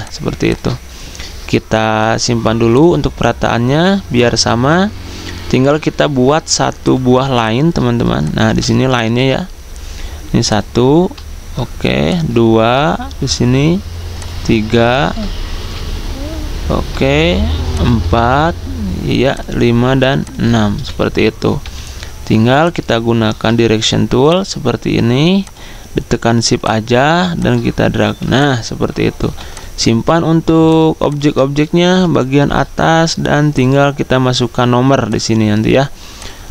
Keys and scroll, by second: 9.1 p, 15.3 x, 20.7 v, 21.6 a, 29.2 v.